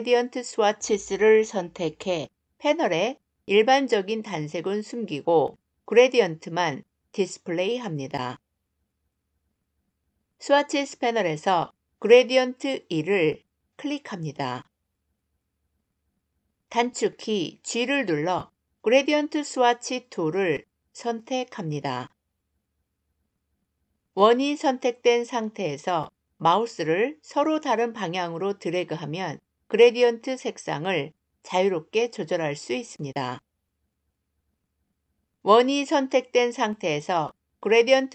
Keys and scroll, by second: 16.9 g.